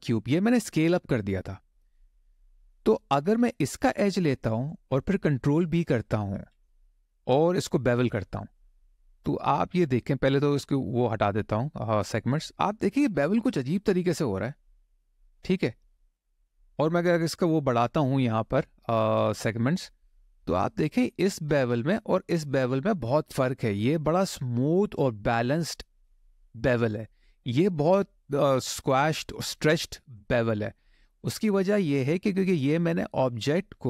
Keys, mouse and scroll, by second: 3.5 click, 6.1 ctrl+b, 9.4-12.1 scroll down 4, 16.7-19.2 scroll up 8, 19.2 scroll down 1, 19.8 click, 20.4 middle click, 26.3 middle click, 30.0 middle click.